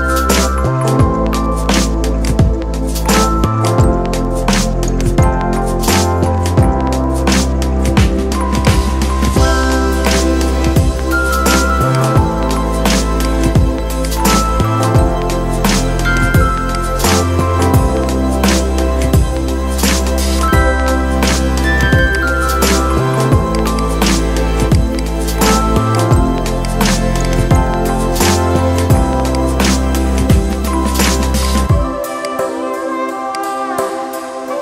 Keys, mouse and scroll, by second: 20.7 ctrl+z, 22.0 click, 23.0-34.6 drag.